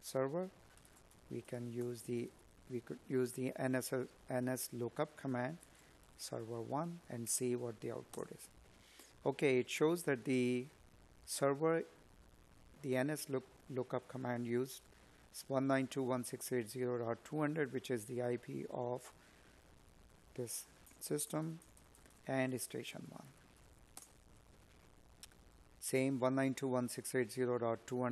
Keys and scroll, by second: 15.9 Up.